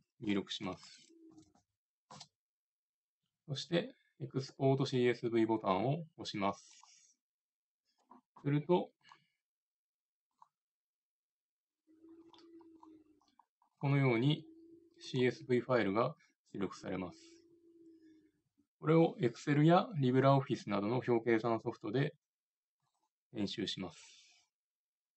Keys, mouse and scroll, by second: 1.3 m, 6.6-8.5 drag.